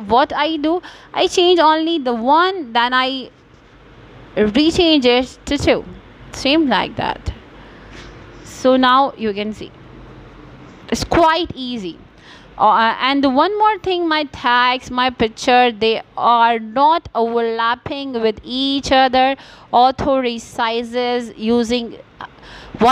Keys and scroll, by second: 21.4 BackSpace, 21.9 Return.